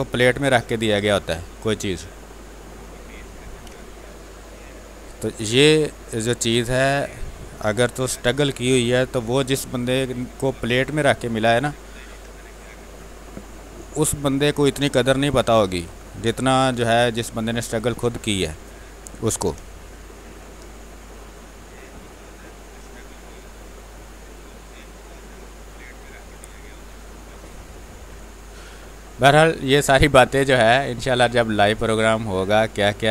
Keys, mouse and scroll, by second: 0.8 space, 0.9 click, 1.3 space, 1.9-3.6 drag, 3.6 space, 4.1 alt+click, 5.4-7.9 drag, 7.9 ctrl+d, 8.1 w, 8.9 ctrl+s, 9.2 w, 9.9 click, 11.6 space, 12.0 ctrl+click, 13.3 w, 13.6 click, 14.1 space, 14.3 click, 14.6 space, 15.0 r, 15.2 click, 16.4 b, 17.1 click, 17.5 ctrl+space, 17.7 ctrl+click, 18.2-19.6 typing, 18.5 click, 20.1 ctrl+click, 20.7 click, 21.6-27.9 drag, 27.9 space, 28.0 click, 28.2 space, 28.6 space, 29.1-30.6 drag, 30.6-33.1 drag.